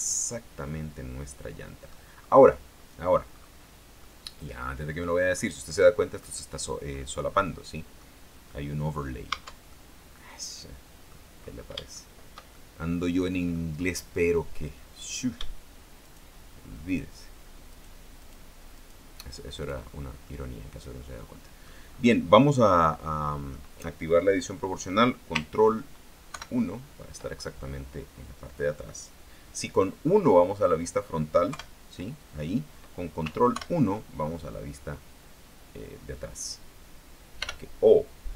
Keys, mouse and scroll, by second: 2.3-2.6 scroll up 2, 2.9 scroll down 2, 3.5-3.8 scroll up 2, 4.2-5.7 middle drag, 6.0 middle click, 7.2-8.3 middle drag, 8.5 scroll up 1, 9.0 scroll down 1, 9.4 Tab, 9.8-11.4 middle drag, 11.4-11.8 scroll down 1, 12.1-13.9 shift+middle drag, 15.2 right click, 16.2 shift+right click, 17.0 shift+right click, 17.8 shift+right click, 18.4 shift+right click, 18.9 shift+right click, 19.7 shift+right click, 20.4-22.0 middle drag, 22.3 scroll down 2, 22.6-23.8 middle drag, 26.4 ctrl+KP_1, 27.7-28.1 ctrl+scroll up 3, 31.6 KP_1, 33.7 ctrl+KP_1, 37.6 o.